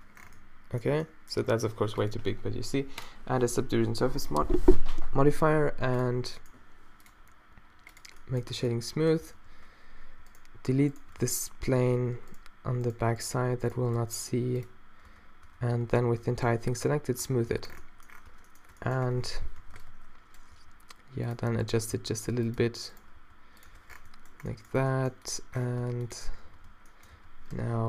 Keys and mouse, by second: 0.0-0.3 typing, 0.0 Tab, 8.6 Tab, 9.4 z, 11.2 x, 13.9 x, 15.1 Tab, 15.5 Tab, 15.8-17.6 typing, 17.3 Tab, 18.3 Tab, 19.4 z, 19.6 a, 19.8 b, 20.6 s, 22.0 s, 23.2 s, 23.7 Tab, 23.9 click, 23.9 z, 24.1-25.0 drag, 25.8 Tab, 26.5 a, 27.2 a, 27.6 g.